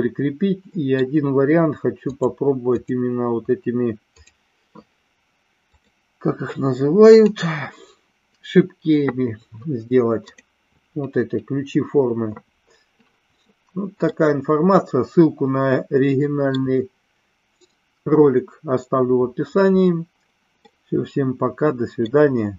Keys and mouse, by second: 2.7 click, 5.7 click, 7.0 click, 14.2-16.6 middle drag, 20.8-22.2 middle drag.